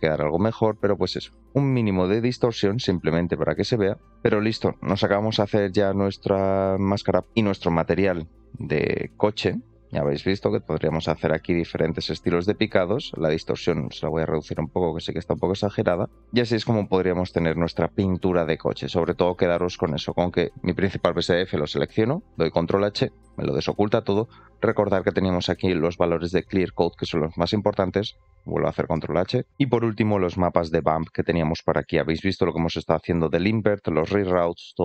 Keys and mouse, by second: 1.3 shift+click, 2.5 middle click, 2.9 shift+middle click, 4.1 shift+middle click, 4.3 middle click, 4.9 shift+middle click, 7.3-9.0 drag, 9.4-9.7 middle drag, 11.4 middle click, 13.0-16.0 shift+drag, 16.6-17.6 middle drag, 19.3 shift+middle click, 19.9 shift+middle click, 24.2 shift+middle click, 25.6 shift+middle click, 31.0 middle click, 31.6 click, 32.9 click, 33.2 g, 34.7 click.